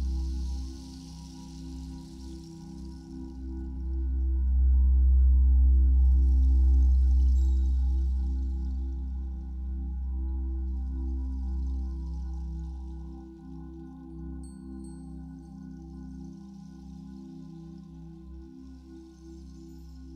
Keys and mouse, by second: 0.8 space, 1.7 click, 2.6 click, 3.6 click, 4.6-7.8 drag, 11.3 click, 12.8 i, 13.6 click, 14.7-16.2 drag, 17.2 typing.